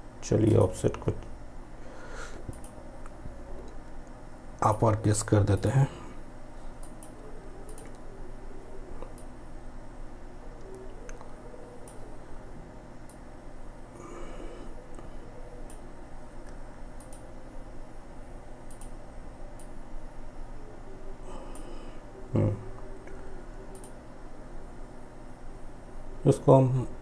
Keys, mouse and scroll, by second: 12.1-16.0 drag, 18.7-22.8 drag.